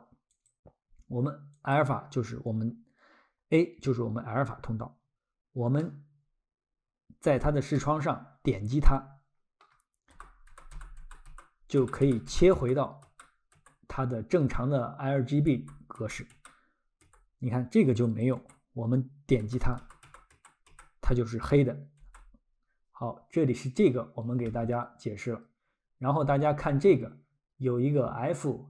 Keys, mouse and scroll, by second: 0.3 click, 2.6 scroll, 5.8 middle click, 6.8 middle click, 8.0 middle click, 8.6 middle click, 10.1-13.6 typing, 16.0-17.0 typing, 17.8 click, 18.2 click, 18.4 1, 19.4-20.7 typing, 21.8-22.5 typing.